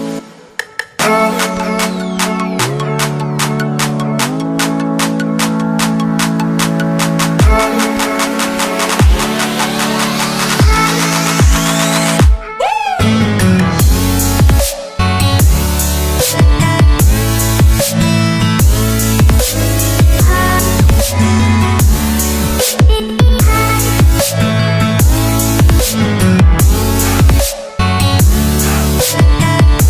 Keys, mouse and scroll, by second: 0.5 scroll up 2, 1.1 click, 1.3-1.6 scroll up 2, 2.0 scroll down 2, 2.7-3.2 scroll up 3, 4.8 click, 6.7 typing, 8.9 typing, 11.1 shift+Num_Lock, 12.3 click, 19.7 alt+scroll down 1, 20.8 alt+scroll up 2, 21.6-22.4 alt+scroll down 4, 22.8-23.4 scroll up 3, 23.6 scroll down 1, 24.0 scroll up 2, 24.7 click, 26.1 alt+Tab, 26.8 click, 28.8 Tab.